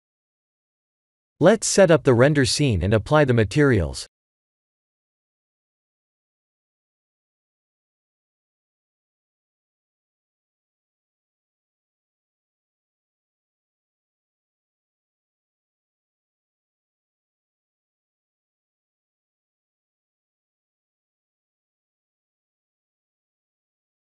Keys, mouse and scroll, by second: 0.6 click, 2.4 click, 6.6 click, 8.4 click, 13.5 click, 14.6 click, 18.2 click, 18.6 middle click, 19.0 middle click, 21.4 middle click, 22.0 middle click, 22.6 middle click.